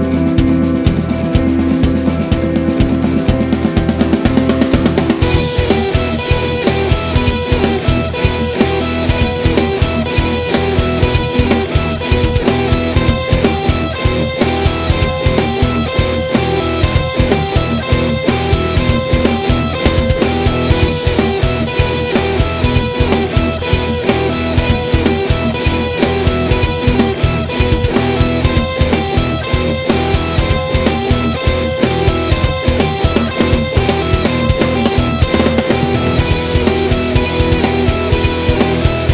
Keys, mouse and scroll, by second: 1.0 click, 1.8 Delete, 2.9 click, 3.5 Delete, 4.2 click, 4.4 Delete, 5.0 click, 5.6 click, 5.7-7.2 drag, 7.9 middle click, 8.6 Tab, 8.8 click, 9.5-11.7 middle drag, 11.7 click, 12.9-14.4 drag, 13.7 Tab, 14.6 click, 14.8 shift+click, 15.1 e, 18.2 click, 18.6 s, 19.2 click, 19.3 g, 19.9 click, 20.0-21.4 middle drag, 21.4 click, 22.0 click, 22.2 middle click, 22.8-24.9 drag, 23.2 g, 25.0 middle click, 25.8-27.8 drag, 26.4 g, 28.0-29.1 middle drag, 28.4 scroll down 1, 29.1 click, 29.7 KP_7, 30.1 click, 31.1 click, 33.2 Delete, 34.4 ctrl+z, 34.8 click, 36.5 Delete, 37.5-38.6 drag, 38.7 click, 39.0 click.